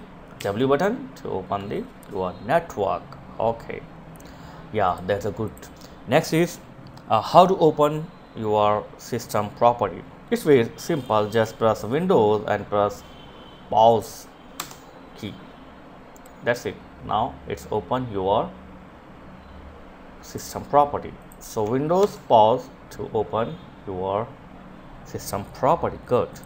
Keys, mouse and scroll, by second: 4.4 click, 19.8 click, 25.8 click.